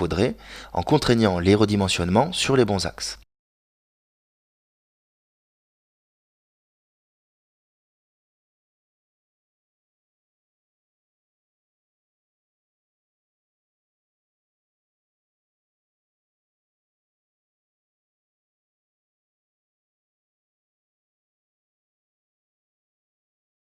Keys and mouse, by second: 2.2 ctrl+r, 4.6 ctrl+r, 7.9 KP_Decimal, 9.1-10.2 middle drag, 10.7 s, 14.5 middle click, 16.1 s.